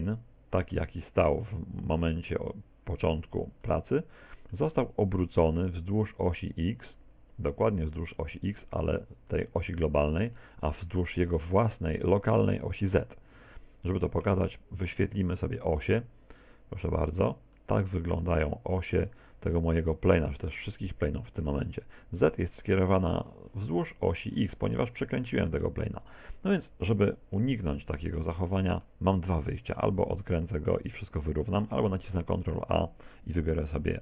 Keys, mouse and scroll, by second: 0.8 Tab, 3.7 middle click, 9.3 middle click, 10.4 middle click, 10.9 middle click, 13.3 Tab, 15.4 click, 16.9 click, 17.6 middle click, 18.5 middle click, 19.3 middle click, 25.1 middle click, 25.6 middle click, 27.3 scroll down 4, 27.8 middle click, 28.4 middle click, 29.3 middle click, 32.3 ctrl+a.